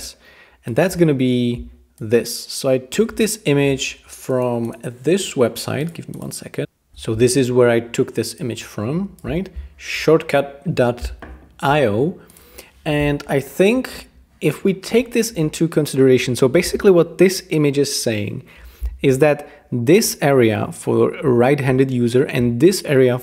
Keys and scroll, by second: 12.8 BackSpace.